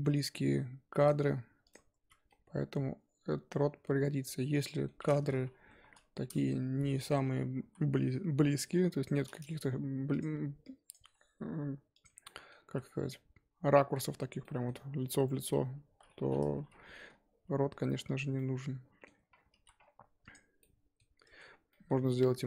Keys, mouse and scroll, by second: 1.6 click, 2.0 f, 2.1 scroll down 4, 2.3-4.9 middle drag, 4.9-5.6 scroll up 3, 5.6 KP_3, 6.2-7.2 scroll up 1, 7.2 1, 7.6 z, 8.6 click, 9.5 g, 10.6 click, 11.0 g, 12.2 middle click, 12.6 z, 12.8 scroll down 5, 13.1-15.1 middle drag, 15.1-16.4 scroll up 4, 16.4 KP_3, 17.4 g, 18.4 middle click, 19.1 Tab, 19.3 scroll down 1, 19.5 z, 20.5 click, 20.6 middle click, 21.2 Tab, 21.3-21.7 scroll up 4, 21.7 middle click, 21.9-22.4 scroll up 1.